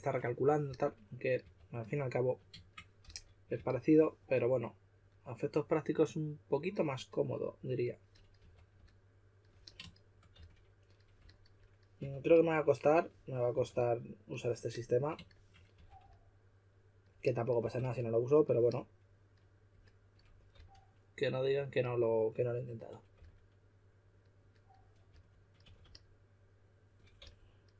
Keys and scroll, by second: 0.6-4.0 typing, 8.4 typing, 10.3 s, 12.0 2, 13.5 2, 15.7 2, 17.6 2, 20.5 typing, 23.1 typing, 25.0-25.6 typing, 27.1-27.7 typing.